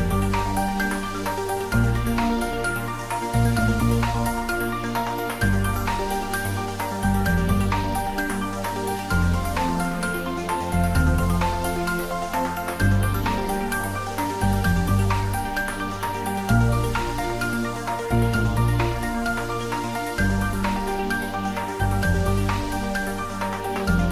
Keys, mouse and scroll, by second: 1.6 y, 2.6 3, 3.2 scroll up 1, 4.6-5.5 typing, 7.1 click, 7.9 shift+click, 8.9-11.0 typing, 11.0 click, 12.6-13.0 scroll down 1, 13.0 middle click, 14.0-14.4 scroll down 1, 14.4-16.6 middle drag, 16.6 shift+click, 17.2 shift+middle click, 18.1 scroll down 1, 18.5-20.5 middle drag, 20.5 shift+click, 21.1 scroll up 1, 21.7-24.1 middle drag.